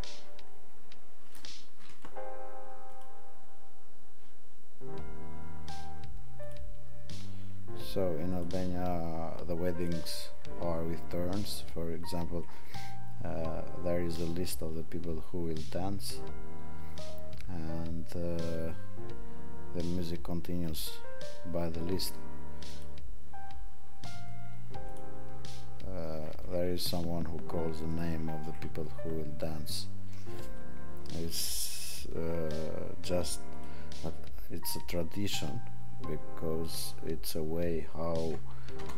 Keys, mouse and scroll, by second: 20.6 click.